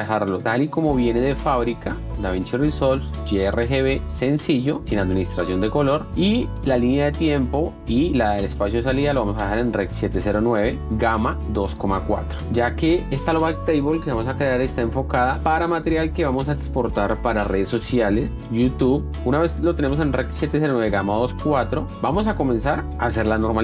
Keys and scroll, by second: 12.7 F1, 18.3 F1, 22.9 F1.